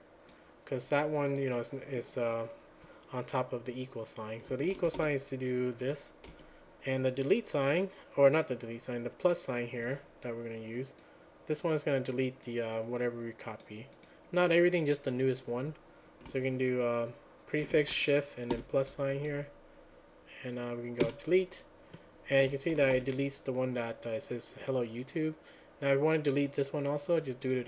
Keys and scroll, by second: 5.0 ctrl+a, 5.0 =, 6.4 q, 18.6 ctrl+a, 21.4 Return, 22.8 ctrl+a, 23.0 =.